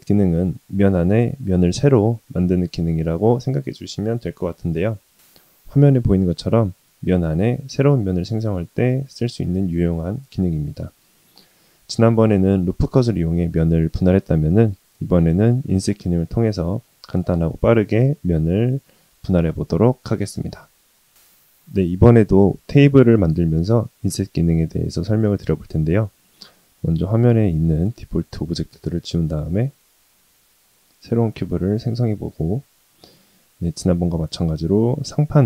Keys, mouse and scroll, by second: 27.7 middle click, 28.2 scroll up 2, 28.9-29.4 scroll down 1, 29.5 shift+a, 31.4-32.1 middle drag.